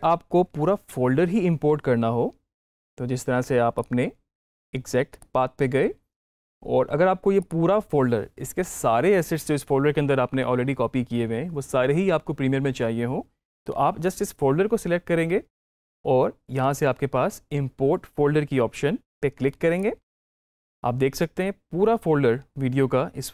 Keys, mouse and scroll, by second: 0.4 ctrl+i, 3.6 click, 19.6 click.